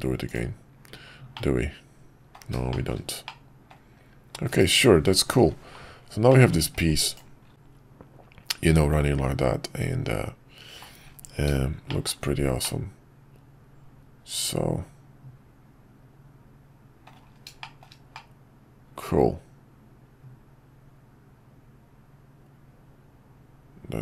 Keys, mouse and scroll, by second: 1.3-2.3 middle drag, 2.7 shift+middle click, 3.2-3.7 middle drag, 6.3 middle click, 7.5-10.8 middle drag, 11.9 shift+middle drag, 12.6-17.1 middle drag, 17.6 shift+middle drag, 18.1-24.0 middle drag.